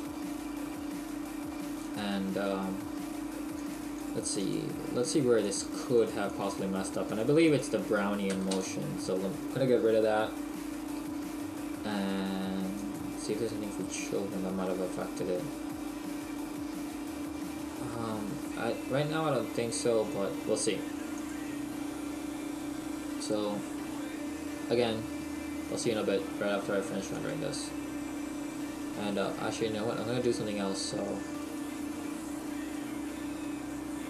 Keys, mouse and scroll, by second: 0.0 Escape, 0.0 right click, 1.9 click, 3.6-9.1 click, 12.8 click, 14.1-14.7 scroll down 1, 14.7-15.4 scroll down 1, 15.4-16.5 scroll down 1, 21.2 click, 27.2 click, 28.6-29.2 scroll down 1, 29.2 middle click, 29.2 scroll down 2, 31.3 right click, 33.5 middle click.